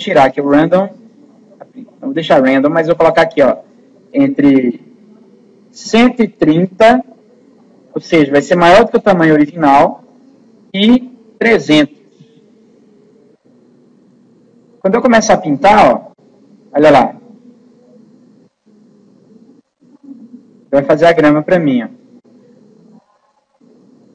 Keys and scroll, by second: 5.8 2, 8.7 1, 11.7 3.